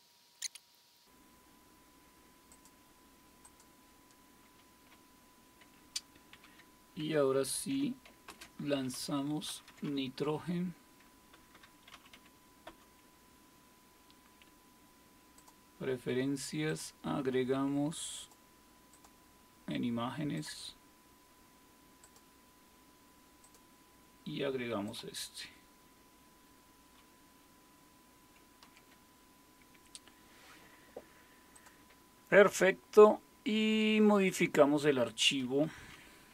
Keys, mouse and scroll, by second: 0.7 click, 0.9 click, 2.5-6.3 drag, 6.3 super+2, 8.3 super+space, 8.9-12.6 typing, 12.7 Return, 15.4-18.1 drag, 19.5 click, 21.0-27.5 drag, 28.6 super+w, 31.5 click, 34.2 click, 35.1-36.3 drag.